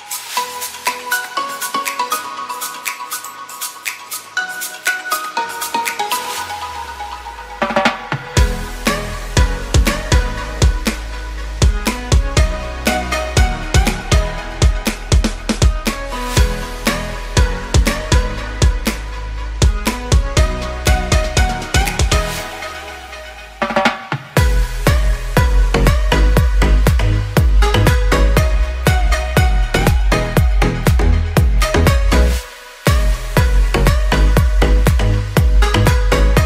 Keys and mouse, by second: 1.7 a, 2.2 shift+middle click, 3.3 b, 4.9-6.0 drag, 6.3 a, 7.0 b, 7.5 e, 8.2-9.5 drag, 9.5 a, 9.6 b, 11.6 click, 11.8 shift+click, 12.0 a, 12.1 b, 12.9 e, 13.7 click, 14.5 shift+drag, 15.2 click, 16.1 a, 16.4 b, 17.1-18.1 drag, 18.4 ctrl+r, 20.3 a, 20.6 b, 21.6-22.8 drag, 22.8 a, 23.1 ctrl+r, 25.3 shift+click, 26.2 s, 31.9 b, 32.9 s, 35.6 b.